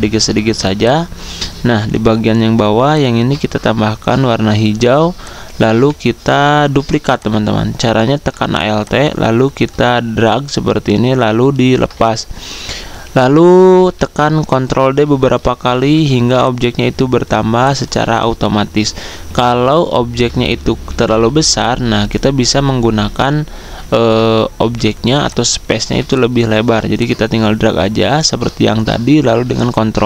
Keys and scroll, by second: 4.9-6.2 typing, 13.6 ctrl+d, 16.1 z, 17.5-18.3 typing, 20.3 ctrl+z, 20.7 ctrl+z, 25.1-25.8 typing, 29.3 ctrl+d, 29.6 ctrl+d.